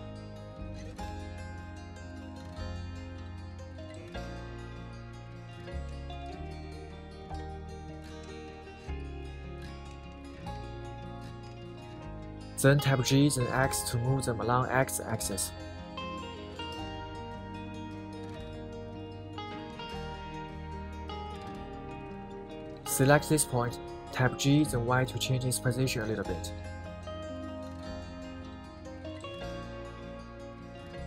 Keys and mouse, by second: 0.5 click, 1.2 KP_1, 2.4-7.0 middle drag, 7.3 KP_7, 8.6-9.6 middle drag, 10.1 middle click, 11.4 KP_7, 12.9 shift+middle click, 13.7 g, 14.2 x, 16.0 click, 16.7-20.0 middle drag, 20.2 KP_3, 21.4 shift+middle click, 23.1 click, 24.4 g, 24.7 y, 27.5 right click, 28.1-31.0 middle drag.